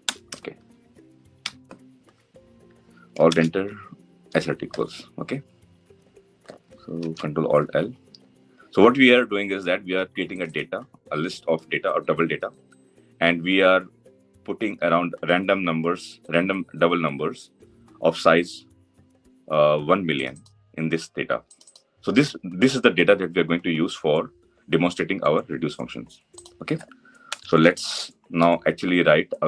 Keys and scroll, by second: 6.7 ctrl+alt+l.